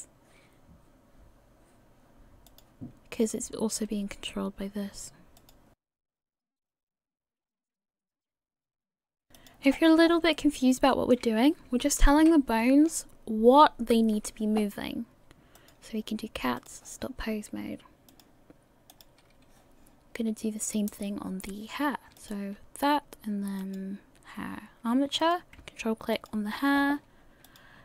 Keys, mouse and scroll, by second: 3.4 right click, 3.8 r, 5.9 shift+middle click, 6.0 right click, 6.1 click, 6.4 right click, 6.5-6.9 click, 6.8 click, 7.0 scroll down 4, 7.0 shift+middle click, 7.1 scroll up 2, 7.2 right click, 7.3 right click, 7.4 scroll down 1, 7.4 scroll up 8, 7.5 shift+middle click, 7.7 middle click, 7.7 click, 7.8 click, 8.2 click, 8.2 click, 8.6-9.0 click, 8.9 click, 9.0 scroll down 5, 9.2 middle click, 9.2 click, 9.4 click, 9.7-10.5 scroll down 13, 10.3 middle click, 12.2 KP_1, 15.6 click, 16.6 click, 22.2 click, 23.6 click, 26.1 click, 26.3 ctrl+click, 27.4 click.